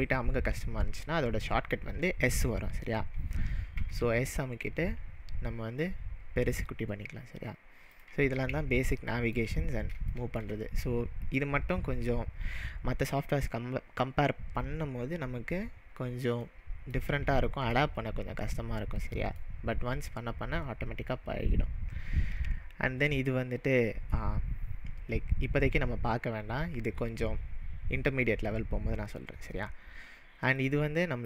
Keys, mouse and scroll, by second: 3.8 s, 4.8 s, 7.9 click, 9.0-14.4 middle drag, 16.5-22.4 middle drag, 30.7 click.